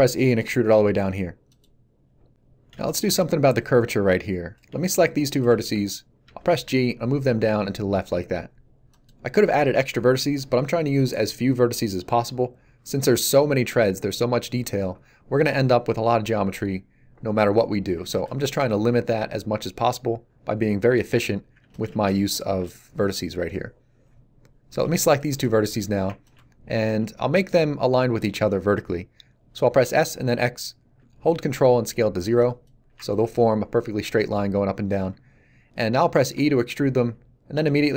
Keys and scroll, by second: 6.2 g, 29.7 s, 30.1 x, 36.3 e, 37.5 s.